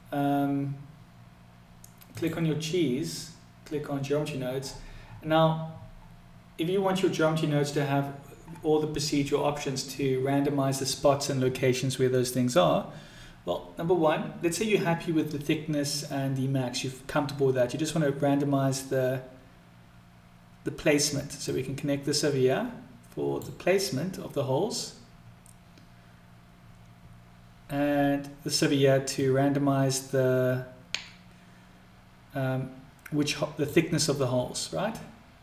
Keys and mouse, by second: 2.1 click, 21.5-26.9 drag, 29.3-35.4 drag.